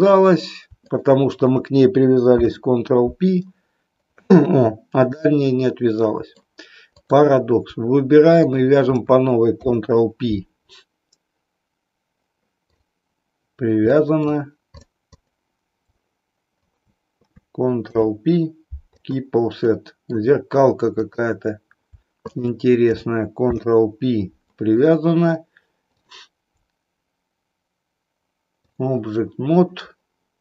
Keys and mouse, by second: 2.3 ctrl+p, 4.3-6.5 middle drag, 8.3 shift+click, 9.5 ctrl+p, 12.7 click, 14.0 middle click, 14.7 click, 15.1 click, 16.5 shift+click, 17.8 ctrl+p, 19.7 middle click, 21.0 click, 22.2 shift+click, 23.3 ctrl+p, 25.8-28.8 drag.